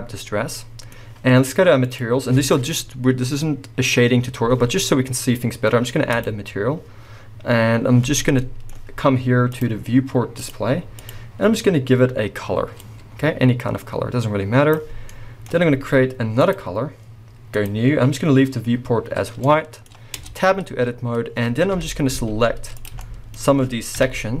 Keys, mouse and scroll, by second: 0.1-0.6 scroll down 2, 0.6-1.8 middle drag, 0.9-1.8 scroll up 2, 1.8 click, 6.1-8.3 drag, 7.0-8.3 scroll down 2, 8.3-9.5 middle drag, 9.5-11.1 drag, 15.1-16.4 middle drag, 16.4-19.4 drag, 19.4-24.4 middle drag, 20.2 b, 20.6-21.7 scroll up 2, 21.7 KP_1, 24.0 KP_3.